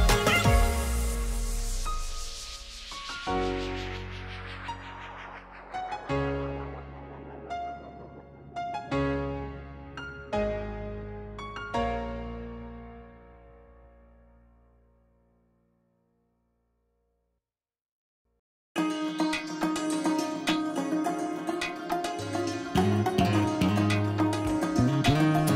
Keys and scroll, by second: 2.6 ctrl+g, 18.7 ctrl+Home.